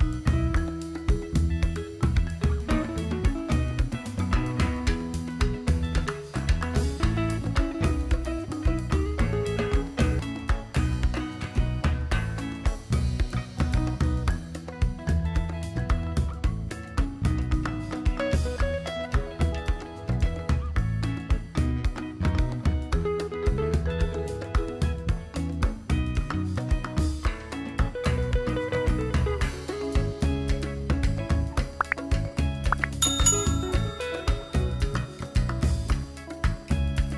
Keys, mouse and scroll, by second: 4.4 click.